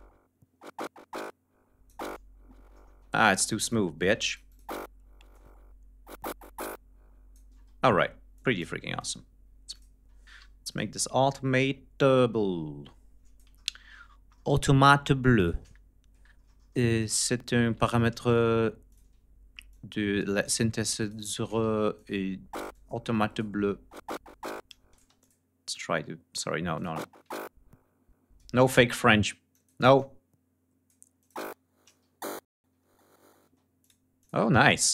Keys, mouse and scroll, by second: 2.6 space, 3.2 click, 3.7 space, 3.9-4.5 drag, 5.0-7.2 drag, 7.2 space, 8.0 click, 8.7 click, 9.4 click, 10.0 d, 10.4 click, 11.8-13.3 drag, 13.3 ctrl+scroll down 2, 15.1 shift+right click, 15.6 ctrl+shift+scroll down 2, 17.2-17.7 ctrl+scroll up 4, 18.6 click, 19.4 click, 20.7 click, 21.1 space, 21.6 click, 22.4 click, 24.4 click, 24.7 space, 24.9 click, 25.4 click, 26.4 ctrl+click, 26.6 space, 26.7 ctrl+scroll up 2, 27.9 space, 28.1 click, 29.0 click, 29.5 click, 30.7 click, 30.9 space, 31.6 ctrl+scroll down 2, 32.6 ctrl+scroll up 2, 32.8 ctrl+space, 33.2 ctrl+click, 33.6 ctrl+click, 34.0 ctrl+click.